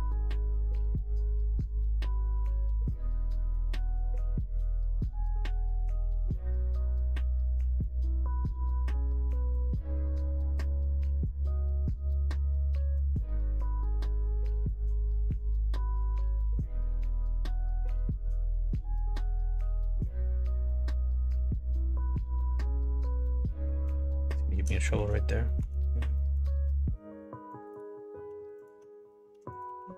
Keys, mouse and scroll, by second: 3.4 middle click, 3.9 shift+middle click, 4.5 click, 5.2 shift+click, 6.7 e, 15.9 click, 16.8 click, 17.0 middle click, 17.8 shift+middle click, 20.4 shift+click, 21.9 f, 23.0 ctrl+z, 23.5 middle click, 24.3 shift+middle click, 24.8 middle click, 25.4 middle click, 26.1 middle click, 26.6 ctrl+r, 29.5 click.